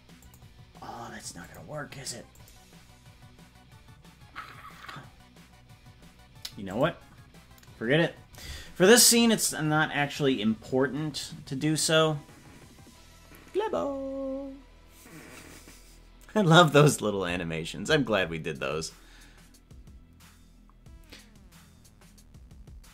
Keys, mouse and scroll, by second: 0.2 click, 1.4 click, 2.4 click, 6.6-7.6 drag.